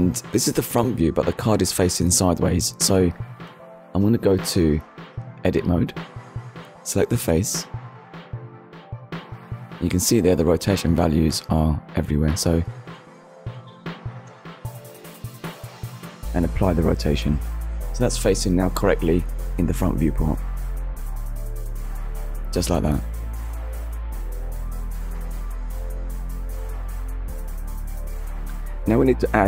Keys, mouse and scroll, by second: 1.7 KP_3, 2.5 KP_1, 3.6 Tab, 4.4 middle click, 5.2 scroll down 1, 6.6 Tab, 7.5 click, 8.8 Tab, 11.3 click, 12.5 KP_0, 12.7 Return, 15.6 ctrl+a, 17.6 click, 20.1 click, 20.4 middle click, 22.3 KP_1, 23.1 scroll up 1, 23.8 click, 24.4 Tab, 25.2 click, 27.3 ctrl+r, 29.1-29.4 scroll up 1.